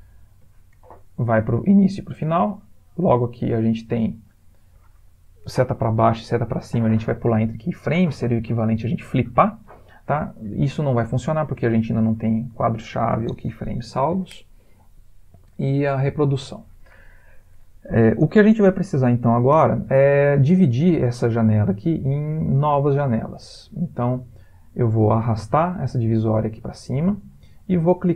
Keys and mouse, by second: 0.0 shift+Left, 21.7 click.